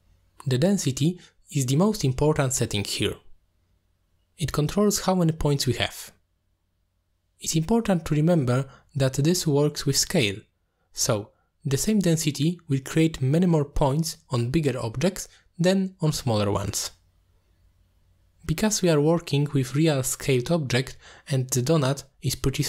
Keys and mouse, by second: 0.0-0.4 shift+middle drag, 0.9 shift+middle drag, 3.2 middle click, 7.6-10.0 drag, 14.3-14.6 middle drag, 15.1-15.5 shift+middle drag, 16.5-19.0 middle drag.